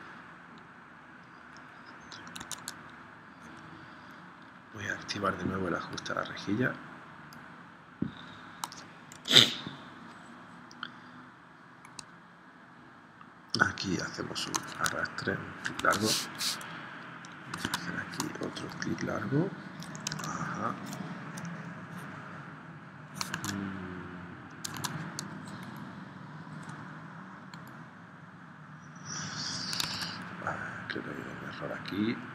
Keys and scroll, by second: 2.4 super+Tab, 9.2 p, 15.8 super+Tab, 17.7 super+Tab, 20.1 super+z, 23.4 super+Tab, 24.8 super+Tab, 29.8 super+Tab.